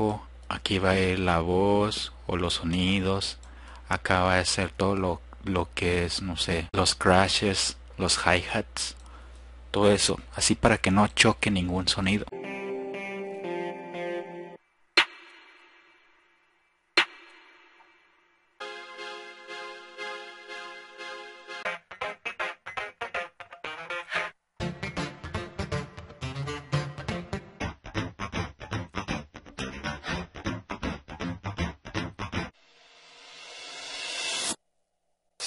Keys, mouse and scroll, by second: 12.5 F1, 12.7 click, 13.9 F1, 13.9 click, 18.2 F1, 21.3 F1, 22.6-23.0 drag, 30.9 drag, 32.4 F1, 32.4 click, 35.2 click.